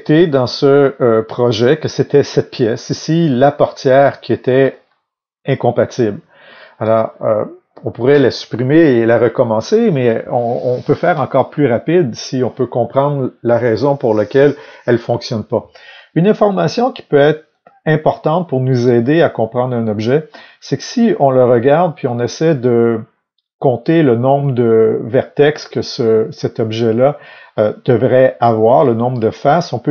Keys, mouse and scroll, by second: 3.2-3.9 scroll up 2, 3.9-4.7 scroll down 2, 16.4-16.8 scroll up 2, 16.8-17.5 scroll down 2, 20.3-24.3 scroll down 2, 24.6-29.9 middle drag.